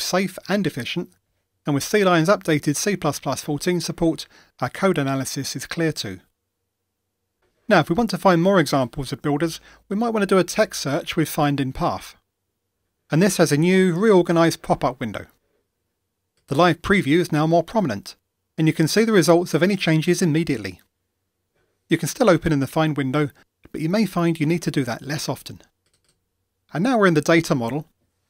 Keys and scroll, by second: 10.4 ctrl+shift+super+f.